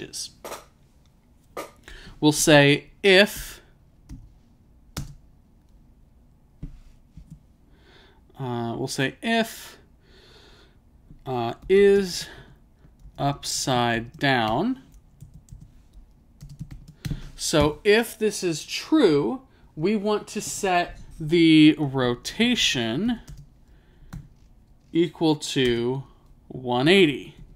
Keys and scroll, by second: 3.4 i, 11.4-12.3 typing, 15.3 typing, 16.7-17.1 typing, 21.8-22.5 typing, 24.2 =, 26.6-27.5 typing.